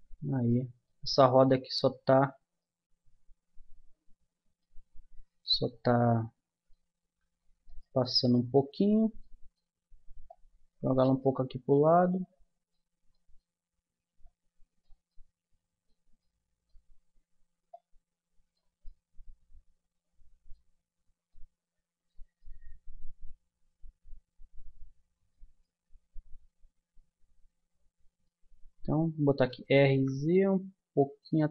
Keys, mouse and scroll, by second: 0.5-3.4 middle drag, 3.7 middle click, 5.7-7.4 middle drag, 7.7-9.2 right drag, 9.2 middle click, 12.1 middle click, 14.2 middle click, 15.3 middle click, 16.4-18.5 middle drag, 18.7-20.4 middle drag, 22.5 middle click, 23.6 middle click, 25.6-27.3 middle drag, 29.3 r.